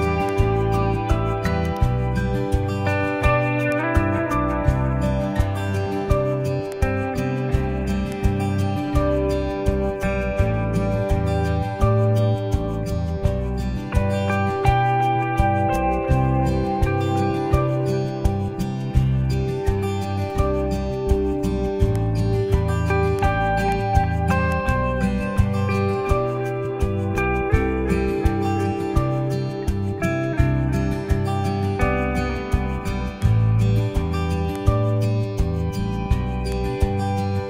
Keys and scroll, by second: 9.6 super+j.